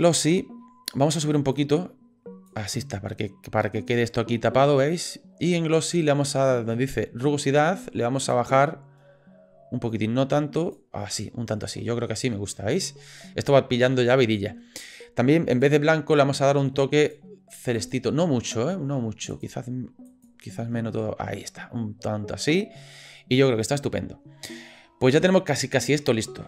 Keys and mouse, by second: 1.6 click, 8.5-10.7 drag, 15.5 click.